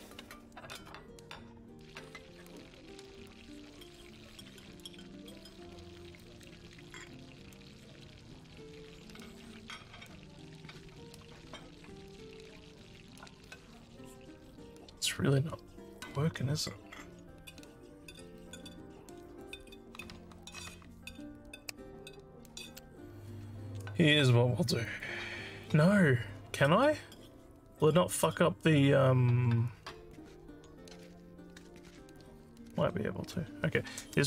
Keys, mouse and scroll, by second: 2.9 click, 3.7 click, 4.3 click, 5.1 click, 6.3 click, 7.2 click, 7.9 click, 9.4 click, 24.9 click.